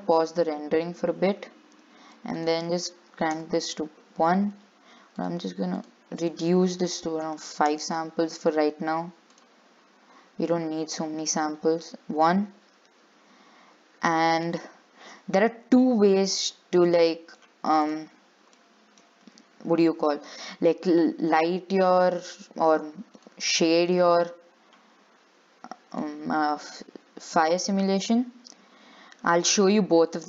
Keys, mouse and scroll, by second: 0.9 click, 3.5-10.8 drag, 14.4-18.1 shift+middle drag, 23.4-26.5 drag, 26.5-30.2 shift+middle drag.